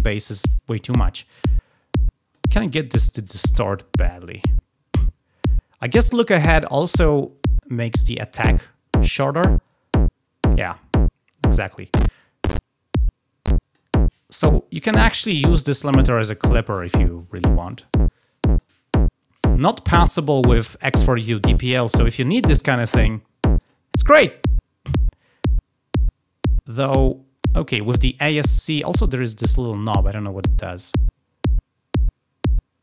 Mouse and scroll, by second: 0.3-2.3 drag, 7.9-13.7 drag, 15.1 click, 17.5 click, 18.4 click, 23.4 click, 27.5 click, 30.0-32.8 drag.